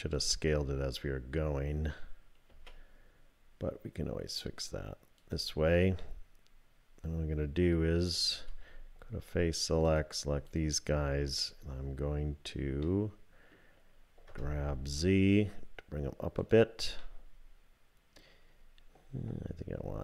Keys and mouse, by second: 0.1 alt+click, 2.5 s, 6.0-7.4 drag, 8.4 3, 9.9 click, 12.8 click, 14.3 g, 17.1-18.2 drag.